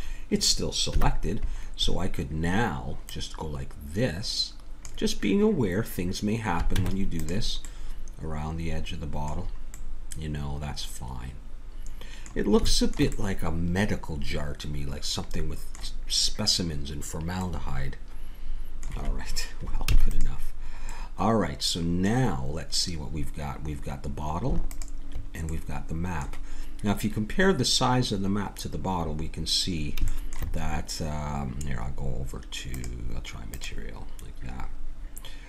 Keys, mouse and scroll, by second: 0.0 middle click, 0.9 KP_1, 3.1-4.7 drag, 4.8-6.0 drag, 6.8 Tab, 7.7 middle click, 9.0 middle click, 10.7 middle click, 10.9 middle click, 11.8 middle click, 12.7 middle click, 13.9 middle click, 17.5-19.9 middle drag, 19.9 ctrl+s, 20.6 middle click, 24.7 click, 25.4 middle click, 33.4-35.4 drag.